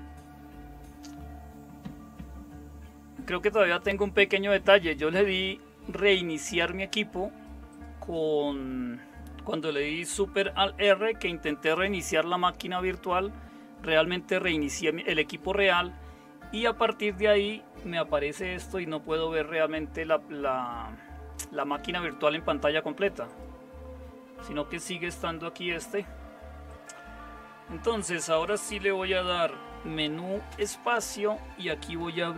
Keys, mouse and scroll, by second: 30.5 super+space.